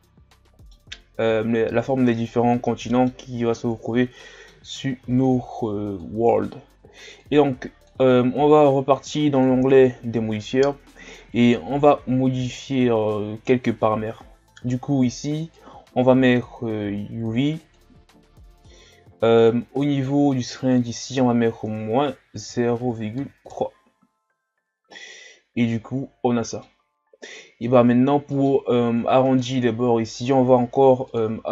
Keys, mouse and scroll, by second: 7.5-9.4 drag, 15.4-18.4 drag, 20.6-23.7 drag, 24.5 scroll up 4, 25.0-26.9 middle drag, 26.9-27.4 scroll down 1, 27.4 middle click, 27.8-28.4 scroll up 2, 30.0-31.0 middle drag, 31.0-31.5 drag.